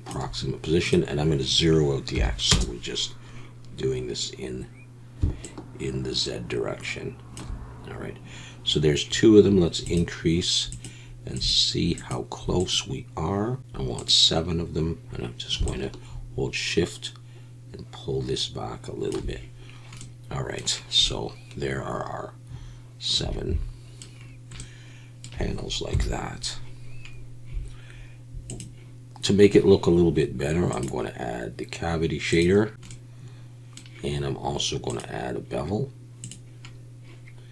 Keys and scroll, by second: 25.9 KP_1.